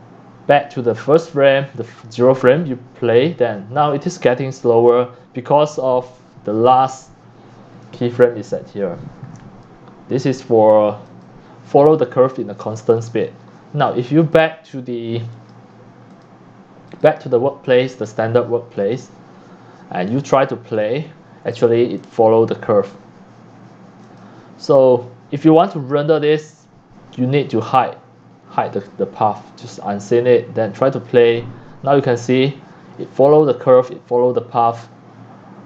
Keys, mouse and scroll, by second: 3.0 click, 7.6 click, 11.0 click, 11.3-12.0 drag, 13.0 click, 13.5 drag, 14.2 click, 15.3 click, 16.1 click, 16.9 click, 17.6 click, 18.4-18.8 scroll down 4, 19.0 click, 19.1-19.9 typing, 20.1-21.1 drag, 21.5 c, 22.0 click, 24.0 click, 29.5 click, 30.4 click, 31.1 click, 33.4-35.6 drag.